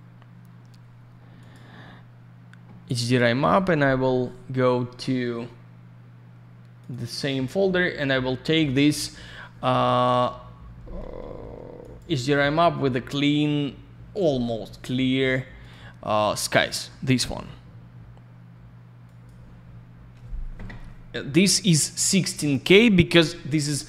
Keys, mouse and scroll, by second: 1.3 click, 1.5 click, 6.8 click, 6.8 click, 6.9 click, 7.0 click, 11.8 click, 11.9 click, 15.0 click, 15.6 click, 15.6 click, 19.0 click.